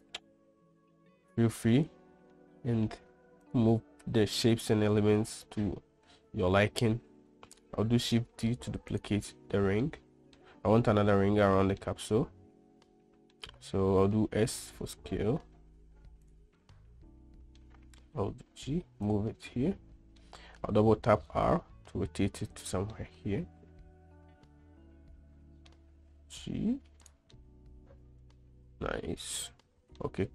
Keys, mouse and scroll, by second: 0.3-1.8 drag, 2.1 click, 2.7-3.2 middle drag, 3.8 click, 7.3 shift+d, 10.2-10.7 middle drag, 12.3-13.7 middle drag, 14.5 s, 16.9-17.9 middle drag, 18.6 g, 19.9-20.6 middle drag, 21.3 r, 23.3-26.1 middle drag, 26.4 g, 27.8-29.7 middle drag.